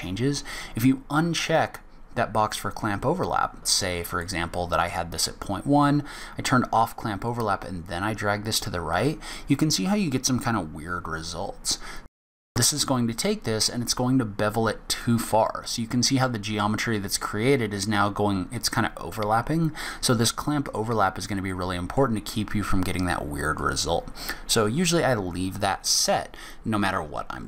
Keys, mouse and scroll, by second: 6.1 click, 7.2 click, 15.4 middle click, 20.6 click, 21.5 middle click, 23.5 click.